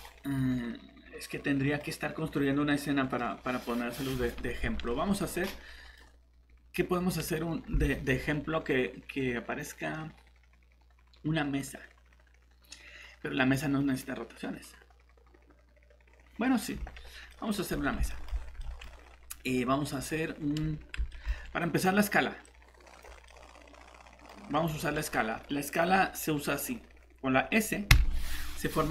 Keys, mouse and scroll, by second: 17.6 scroll down 1, 18.1 middle click, 19.0-19.9 scroll up 1, 19.9 scroll down 1, 21.1 middle click, 22.4 click, 23.3 middle click, 24.3 scroll up 1, 24.7 middle click, 25.0 scroll up 1, 26.5 scroll down 1, 27.9 shift+s.